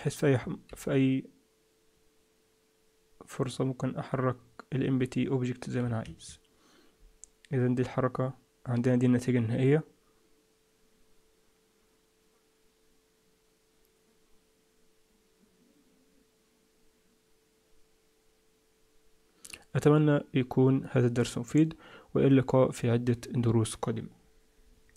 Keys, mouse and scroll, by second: 0.6 g, 21.4 click, 22.0-24.4 scroll up 2.